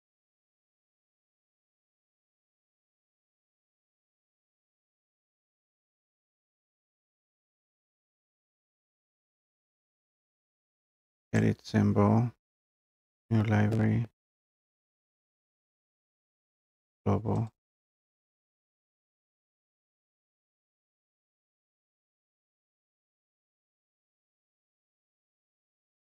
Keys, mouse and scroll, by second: 1.1 right click, 3.5 click, 11.4 click, 14.7 click, 17.5 click, 20.7 click, 20.9-26.0 typing, 23.7 click.